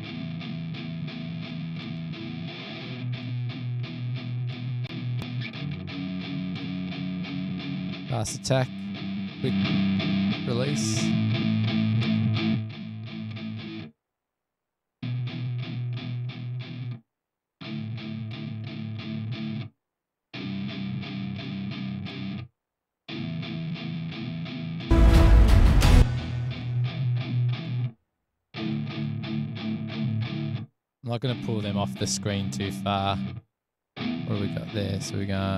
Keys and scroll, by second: 14.9 space, 15.0 space.